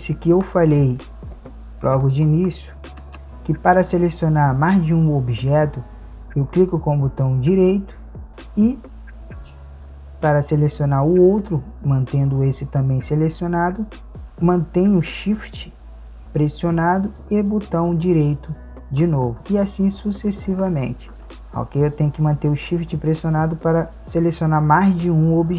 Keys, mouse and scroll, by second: 2.0-3.1 right drag, 3.1 a, 6.7-13.0 right drag.